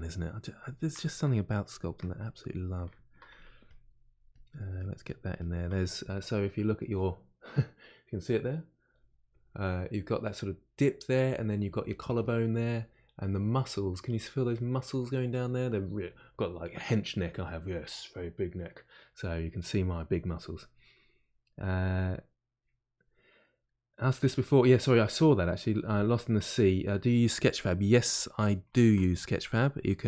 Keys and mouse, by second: 3.3-27.3 ctrl+drag, 27.3-30.0 middle drag.